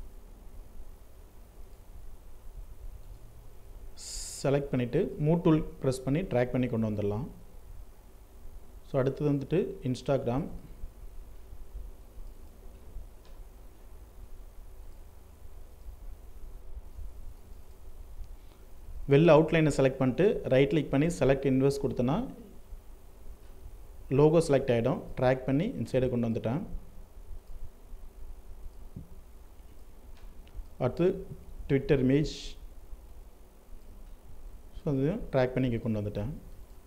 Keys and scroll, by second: 15.8 ctrl+d, 35.5 ctrl+space.